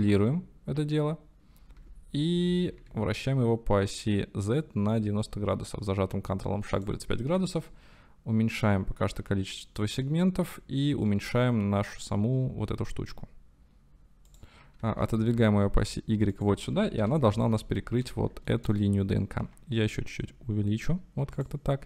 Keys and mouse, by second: 0.0 shift+d, 1.8 r, 2.4 x, 2.8 z, 8.8-9.9 drag, 11.7 s, 14.3 click, 14.8 g, 15.1 y, 16.3 click, 17.0 KP_7, 18.4 shift+click, 19.4 s, 21.4 click.